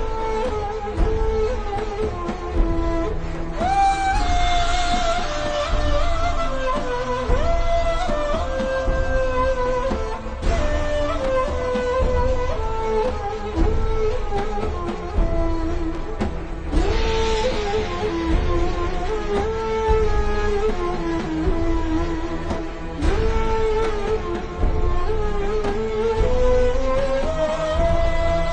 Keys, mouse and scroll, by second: 0.3 v, 0.5 click, 1.5 a, 1.9 click, 3.9 v, 4.1 click, 4.6-5.1 alt+shift+scroll down 2, 5.6-6.5 ctrl+scroll down 2, 6.7-7.6 alt+shift+scroll down 4, 8.3 click, 10.6 alt+shift+click, 10.9 alt+shift+click, 11.7 ctrl+scroll down 1, 12.4 click, 13.0 alt+shift+scroll up 2, 13.4 click, 19.2 click, 21.5 alt+shift+scroll up 1, 22.7 click.